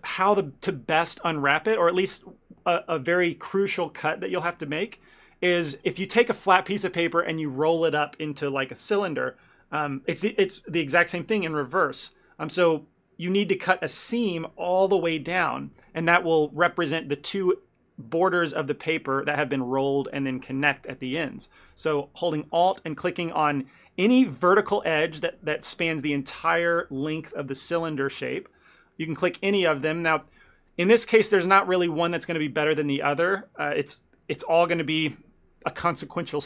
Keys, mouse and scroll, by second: 15.8 shift+middle click, 16.1 ctrl+middle click, 22.6 alt+click, 23.4 middle click, 23.7 shift+middle click, 24.3 alt+click, 24.7 middle click, 25.3 alt+click, 25.6 shift+middle click, 28.5 middle click, 29.2 alt+click, 29.6 middle click, 30.0 shift+middle click, 30.2 ctrl+middle click, 30.6 middle click, 31.0 shift+middle click, 33.7 ctrl+middle click.